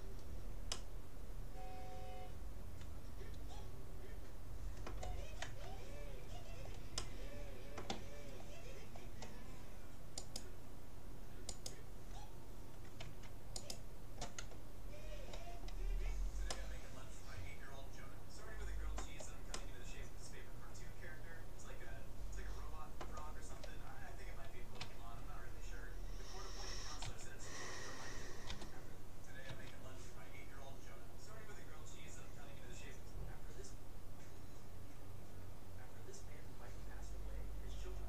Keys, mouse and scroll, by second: 0.3-2.5 middle drag, 5.4 Tab, 6.5-9.5 middle drag, 10.3-13.3 right drag, 13.0 Tab, 13.7-15.3 right drag, 16.1-18.3 middle drag, 19.5-21.3 middle drag, 24.8 a, 27.1 a, 28.5 g.